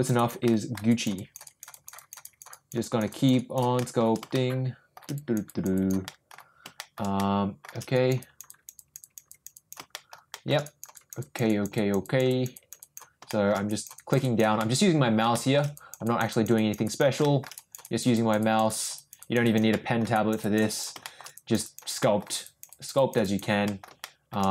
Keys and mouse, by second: 0.2 click, 0.4 middle click, 0.9 click, 1.1 click, 1.4 click, 1.7 click, 1.9 click, 2.2 click, 2.5 click, 2.8 click, 3.1 click, 3.3 click, 3.7 shift+middle click, 4.3 shift+middle click, 5.1 click, 5.4 click, 5.7 click, 6.0 middle click, 6.7 shift+middle click, 7.1 middle click, 7.9 click, 8.2 click, 8.4 click, 8.7 click, 9.0 click, 9.3 click, 9.5 click, 9.9 shift+middle click, 10.3 shift+middle click, 10.6 click, 10.9 click, 11.2 click, 11.4 click, 11.7 click, 12.0 click, 12.3 click, 12.5 click, 12.8 click, 13.3 shift+middle click, 13.7 click, 13.9 click, 14.2 click, 14.6 middle click, 14.8 middle click, 15.3 shift+middle click, 15.7 click, 16.0 click, 16.3 click, 16.5 click, 16.8 click, 17.2 shift+middle click, 17.5 click, 17.8 click, 18.1 click, 18.4 click, 18.7 click, 18.9 click, 19.2 click, 19.4 click, 19.7 middle click, 20.1 click, 20.4 click, 20.7 click, 21.0 shift+middle click, 21.3 click, 21.6 click, 22.0 middle click, 22.4 click, 22.7 click, 22.9 click, 23.2 click, 23.7 middle click, 24.0 shift+middle click.